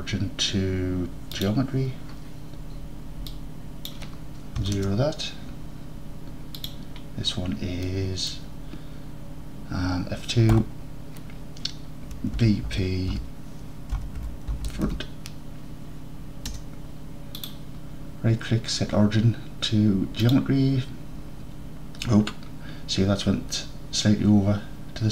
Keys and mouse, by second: 3.5-5.8 drag, 7.9-8.3 drag, 10.6 F2, 17.6-25.1 drag.